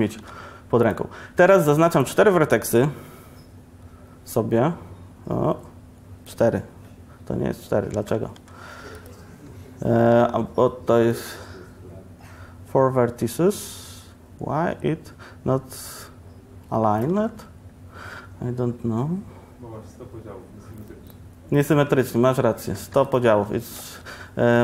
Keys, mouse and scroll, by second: 0.2 b, 1.5 b, 8.0 a, 8.4 b, 10.2 b, 17.2 a, 22.1 Tab, 23.0 x, 23.8 shift+a.